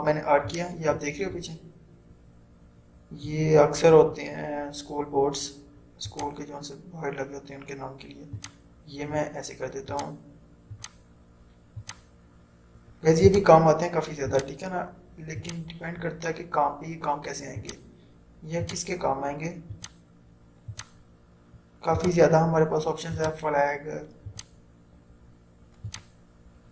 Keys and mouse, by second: 6.1 click.